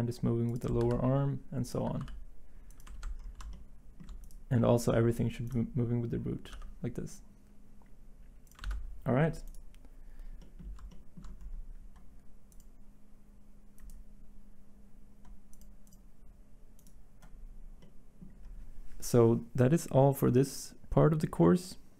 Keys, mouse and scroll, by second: 0.8 ctrl+z, 2.0 r, 2.9 ctrl+z, 6.5 g, 8.6 ctrl+z.